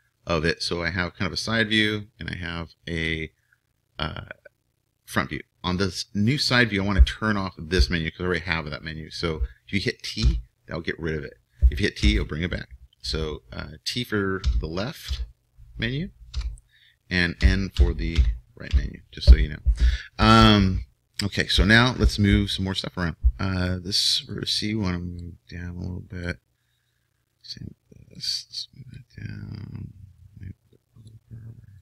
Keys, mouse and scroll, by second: 0.7-10.3 middle drag, 10.3 t, 12.1 t, 14.4 t, 15.1 t, 17.4-18.7 typing, 20.7-24.3 middle drag, 24.3-26.3 right drag, 25.3-27.3 drag, 27.3-29.7 right drag, 28.1-31.8 drag, 31.7-31.8 right drag.